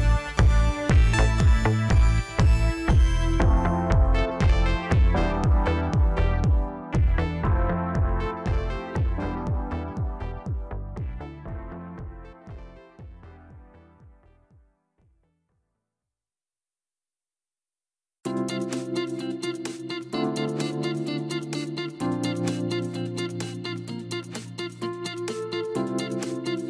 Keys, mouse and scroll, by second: 0.5 click, 1.8 s, 3.2 s, 5.3 s, 6.4 g, 12.3-12.8 scroll up 1, 13.0-13.5 scroll down 1, 13.5 middle click, 14.2-15.2 scroll up 1, 15.2 e, 17.6 Tab, 18.8 ctrl+a, 21.0 KP_1, 21.6-22.7 scroll up 1, 22.7 Tab, 24.1 i, 26.1-26.5 scroll down 1, 26.5-26.6 middle drag.